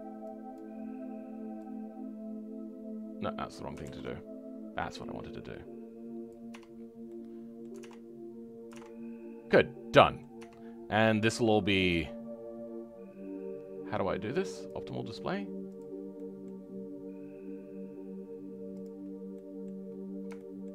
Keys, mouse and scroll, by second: 3.8 ctrl+z, 5.0 click, 6.5 Tab, 6.7-7.0 scroll down 2, 7.0-10.3 right drag, 7.0 middle click, 9.5 middle click, 10.3 Tab, 10.6-14.5 scroll up 2, 14.5-16.1 drag, 16.1-19.0 right drag, 16.1 middle click, 19.0 scroll down 3, 19.3 middle click, 19.8-20.3 scroll up 3, 20.3 shift+middle click.